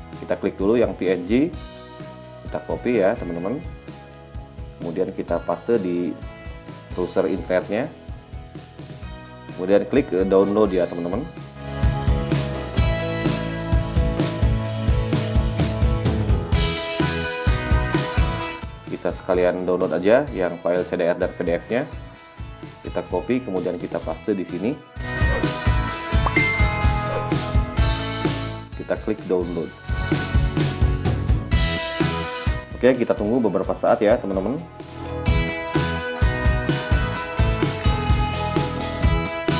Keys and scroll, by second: 7.0 k, 37.1 f.